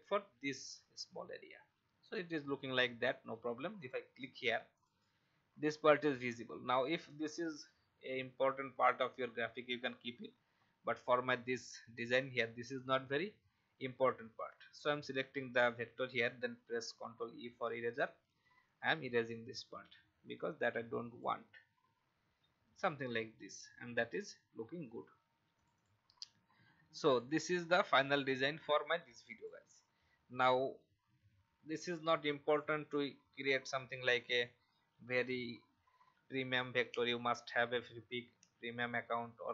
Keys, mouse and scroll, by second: 2.4 alt+scroll down 1, 3.7 click, 7.0 alt+scroll down 1, 10.6-11.6 alt+scroll down 1, 11.8 alt+scroll down 1, 12.7-13.1 alt+scroll up 1, 14.8-15.8 drag, 16.8 shift+e, 18.6-21.9 drag, 22.5 alt+scroll down 1, 23.8 alt+v, 24.7 alt+scroll down 1, 25.5 click, 26.4 alt+scroll down 1, 27.1 click, 30.9 alt+scroll up 1, 31.9 alt+scroll down 1, 32.4-39.5 drag.